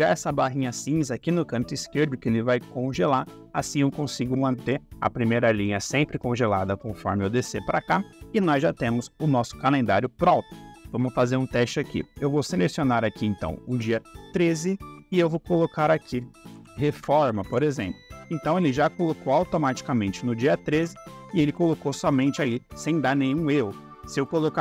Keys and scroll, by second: 16.5 m, 16.9 Tab, 17.2 Down, 17.3 Left.